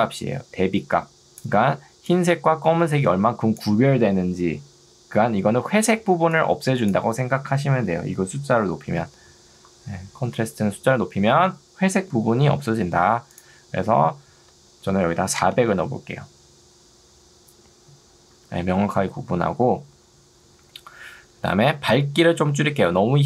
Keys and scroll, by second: 15.0 0, 15.4 Return.